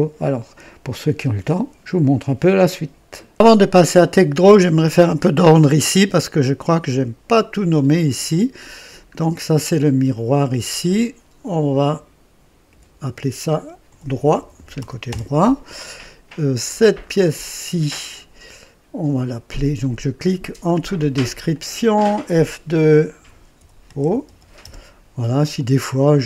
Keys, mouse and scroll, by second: 3.1 right click, 3.2 click, 6.7 click, 8.7 scroll down 1, 10.8 click, 12.6 F2, 13.6-15.2 typing, 16.9 click, 21.4 click, 22.2 F2, 23.2-24.5 typing, 24.5 Return.